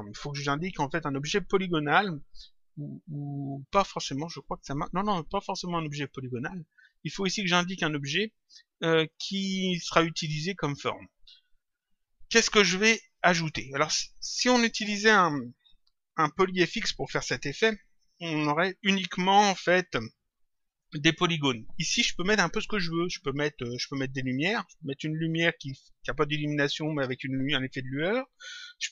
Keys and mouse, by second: 3.2 click, 11.4 click.